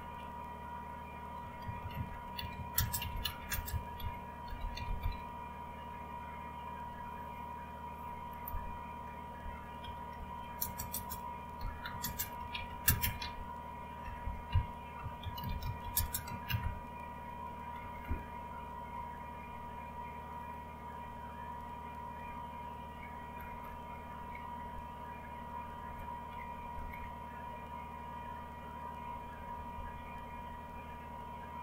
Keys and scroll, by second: 0.0-0.1 typing, 1.1-5.5 typing, 8.5 Return, 10.8-18.8 typing, 17.7 Down, 22.3-22.8 Down, 23.3 Down, 23.6 Down, 23.8 Down, 24.1 Down, 24.5 Down, 25.6 Up, 25.9 Up, 26.3 Down, 26.9-30.0 Down.